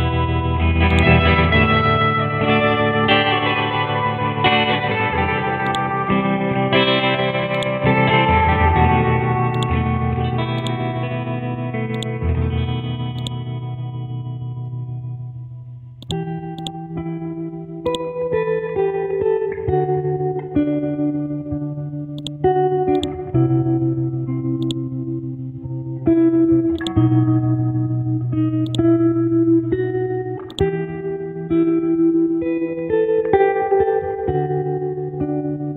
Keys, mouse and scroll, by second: 0.0-0.9 scroll up 1, 0.9-2.3 drag, 2.4-3.4 scroll up 1, 3.7 Home, 5.6 click, 8.4 shift+click, 8.8-9.5 scroll down 1, 9.5 click, 9.9-10.5 scroll down 1, 10.6 click, 11.6-11.9 scroll up 1, 11.9 right click, 13.2 click, 14.4 End, 15.4-15.8 scroll down 1, 16.0-20.3 drag, 20.3-22.2 scroll up 1, 22.2 click, 23.6-24.6 scroll up 1, 24.6-29.7 drag, 30.5 shift+click, 31.9 shift+Up, 32.3 shift+Up, 35.3-35.7 scroll down 1.